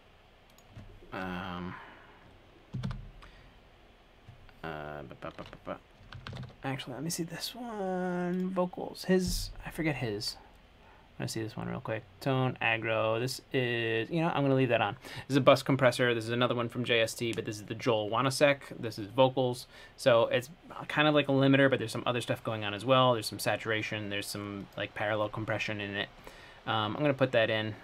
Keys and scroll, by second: 2.7-3.6 typing, 6.2 typing, 8.7-9.4 typing.